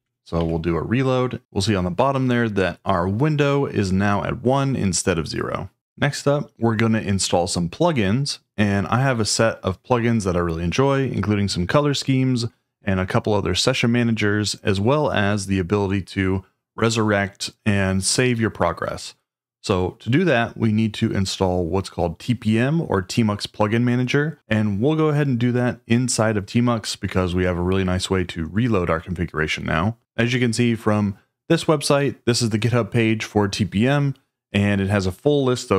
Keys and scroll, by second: 0.3 r.